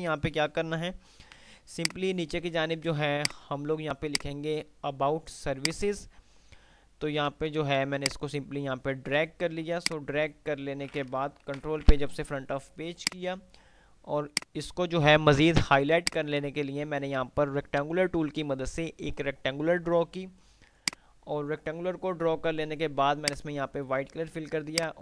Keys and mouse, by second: 1.9 click, 4.6 F2, 5.9 F3, 5.9 click, 7.9-9.4 drag, 9.4 F2, 12.6 F2, 12.9 F2, 12.9 click, 14.6-18.4 drag, 21.1-22.1 drag, 24.9 right click.